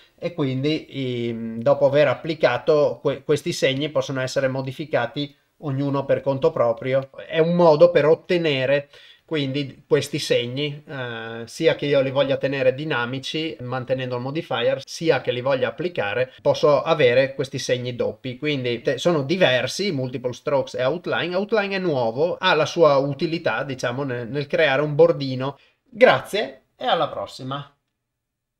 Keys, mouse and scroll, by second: 0.8 f, 1.6 click, 2.9 click, 3.1 click, 3.5 click, 3.8 click, 4.1 click, 4.4 click, 4.7 click, 5.8 f, 6.5 click, 6.8 click, 7.0 click, 7.7 ctrl+Tab, 16.4-25.5 drag.